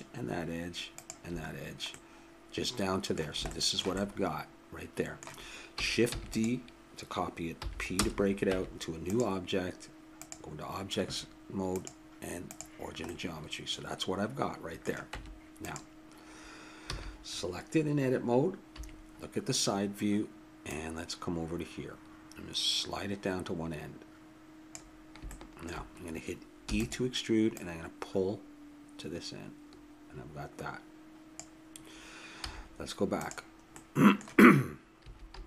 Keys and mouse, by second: 2.3 middle click, 4.4 middle click, 4.4 click, 4.8 middle click, 4.9-6.1 drag, 6.1 shift+d, 7.6 p, 8.5 Tab, 11.0-13.5 drag, 13.1 right click, 13.5 middle click, 15.1 Tab, 16.9 a, 18.7 KP_3, 20.6 click, 25.3-26.6 middle drag, 26.6 e, 32.4 z, 33.7 click, 35.0 a, 35.3 a.